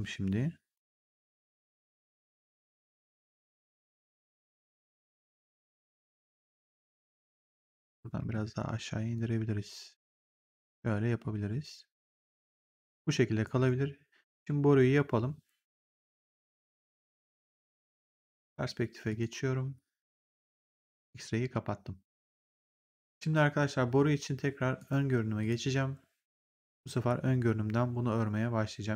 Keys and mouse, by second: 4.6 right click, 7.2 right click, 7.6 click, 8.1 w, 9.1 click, 12.3 right click, 13.3 right click, 19.0 click, 20.9 click, 22.9 click, 24.7 right click, 25.3 click.